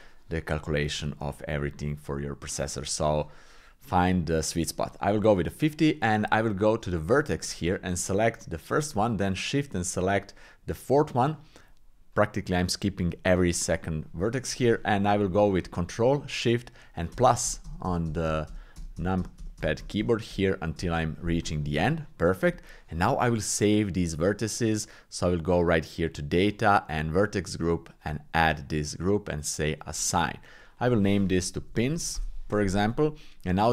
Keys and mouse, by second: 1.6 middle click, 4.1 shift+middle click, 5.7 click, 6.3 Tab, 7.2 shift+middle click, 8.0 click, 9.0 shift+click, 10.7-12.9 shift+drag, 17.2 ctrl+shift+KP_Add, 17.5 ctrl+shift+KP_Add, 17.7 ctrl+shift+KP_Add, 17.9 ctrl+shift+KP_Add, 18.1 ctrl+shift+KP_Add, 18.3 ctrl+shift+KP_Add, 18.5 ctrl+shift+KP_Add, 18.8 ctrl+shift+KP_Add, 19.0 ctrl+shift+KP_Add, 19.2 ctrl+shift+KP_Add, 19.4 ctrl+shift+KP_Add, 19.6 ctrl+shift+KP_Add, 19.8 ctrl+shift+KP_Add, 20.0 ctrl+shift+KP_Add, 20.3 ctrl+shift+KP_Add, 20.8 ctrl+shift+KP_Add, 22.0 shift+click, 27.9 click, 30.0 click, 30.8-32.2 drag, 33.6 click.